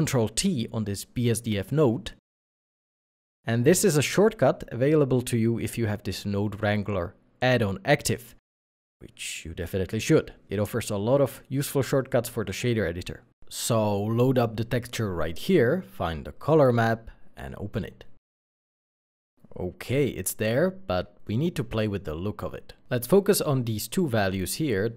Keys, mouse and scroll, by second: 0.4 ctrl+t, 2.1 g, 7.2 w, 7.3 r, 7.4 a, 7.9 n, 21.3 middle click.